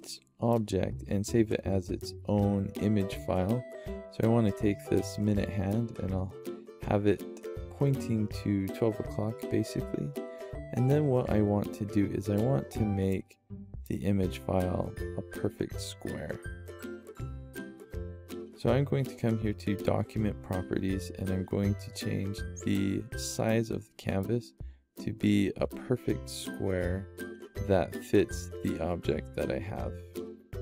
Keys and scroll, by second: 29.6-30.6 typing.